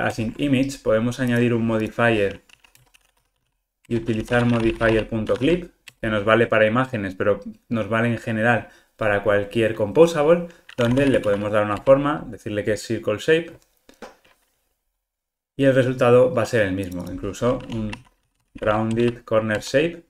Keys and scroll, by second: 0.1 super+BackSpace, 3.8 Return, 11.8 Return, 13.5 ctrl+r, 19.6 Return.